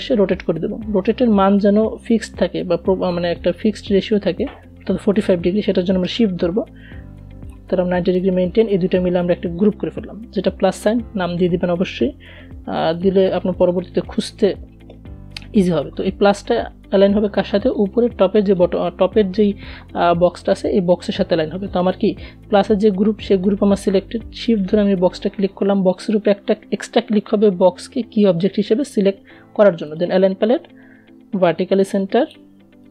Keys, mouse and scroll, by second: 7.7 ctrl+g, 11.1 click, 12.1-13.3 typing, 22.3 Return, 22.6 shift+click, 28.2 click.